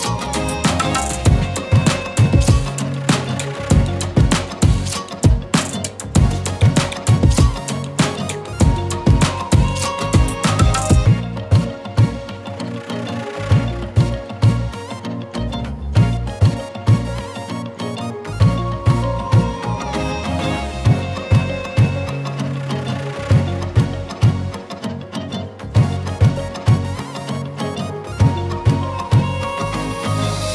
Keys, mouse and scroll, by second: 3.1 shift+click, 4.2 click, 8.2 scroll down 1, 8.8 z, 9.1 click, 9.3 z, 9.5 space, 9.6 click, 12.2-14.4 alt+drag, 14.5 z, 15.0 space, 15.3 click, 15.3 z, 15.4 click, 17.7 Right, 19.9 z, 20.3 click, 20.5 z, 20.6 space, 20.7 click, 22.6-26.4 alt+drag, 27.1 ctrl+d.